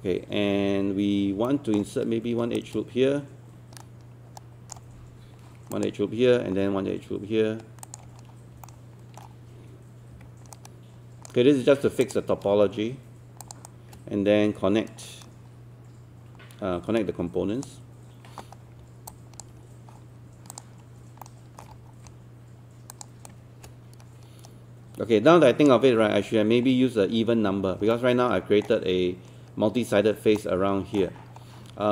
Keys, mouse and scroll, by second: 1.5 alt+middle click, 2.6-4.8 shift+right drag, 5.8 ctrl+click, 7.8 ctrl+click, 8.6 alt+middle click, 10.2 alt+q, 10.6-11.7 right drag, 12.0 click, 13.4 shift+click, 13.7-17.7 shift+right drag, 18.7 scroll down 1, 19.1 alt+click, 20.5 click, 21.2 alt+middle click, 23.3-25.7 shift+right drag, 26.1-26.7 scroll down 1, 26.7-27.8 scroll up 1, 28.0 alt+middle click, 30.4 alt+middle click, 31.1-31.6 scroll down 1, 31.6-31.9 scroll up 1.